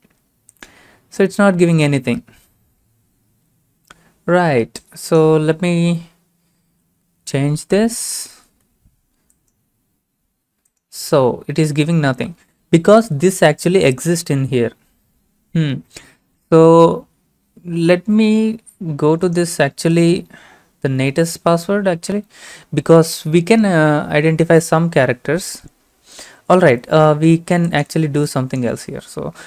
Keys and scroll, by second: 1.5 ctrl+v, 6.7 0, 8.0 ctrl+a, 8.3 ctrl+c, 11.4 ctrl+v.